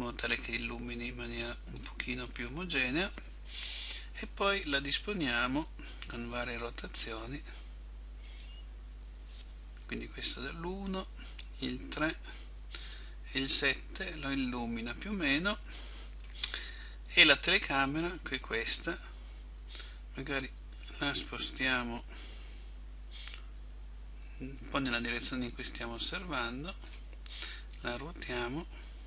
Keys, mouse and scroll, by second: 0.9 click, 4.2 KP_1, 6.4 r, 10.8 KP_3, 13.0 KP_7, 18.0 right click, 22.5 click.